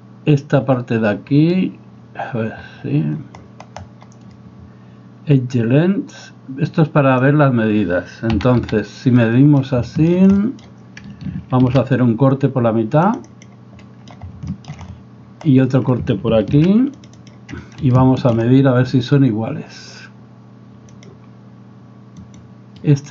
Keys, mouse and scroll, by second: 8.4 a, 8.7 a, 9.3 middle drag, 9.5 click, 9.9 shift+drag, 10.4 click, 11.7 ctrl+r, 13.8 middle click, 13.9 click, 14.5 shift+middle drag, 16.5 ctrl+r, 18.0 shift+click, 18.1 shift+middle click, 21.0 click, 22.2 right click, 22.8-23.1 middle drag.